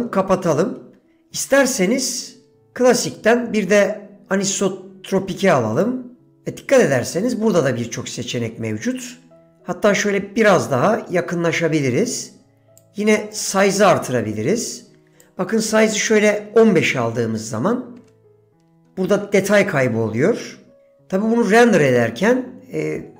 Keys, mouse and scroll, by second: 2.7-6.1 drag, 10.8-11.5 shift+middle drag, 12.8 click, 13.4 click, 15.2-18.4 drag.